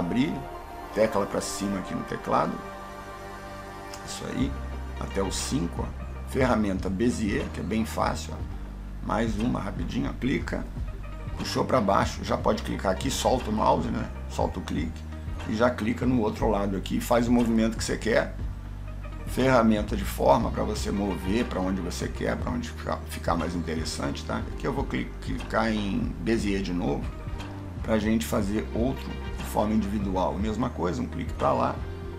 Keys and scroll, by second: 2.1 Up.